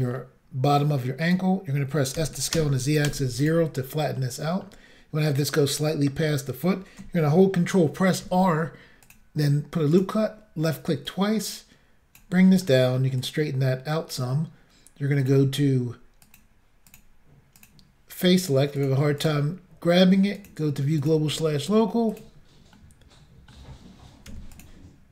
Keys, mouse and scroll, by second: 0.8 click, 2.2 s, 2.5 z, 3.1 0, 3.4 click, 4.2 middle click, 5.8 middle click, 8.2 ctrl+r, 9.1 click, 9.9 click, 11.0 click, 12.4 middle click, 13.2 click, 15.2 click, 15.3 click, 16.2 click, 16.8 click, 17.5 click, 18.7 click, 19.2 click, 19.2 double click, 20.4 double click, 21.0 shift+click, 22.1 click, 22.7 middle click, 24.3 e, 24.5 click.